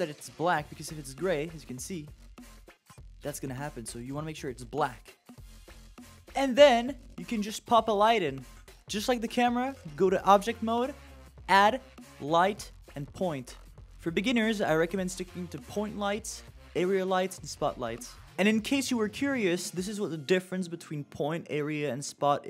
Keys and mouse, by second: 6.4 click, 15.2 click, 15.6-16.0 middle drag, 16.8 middle drag, 18.0 click.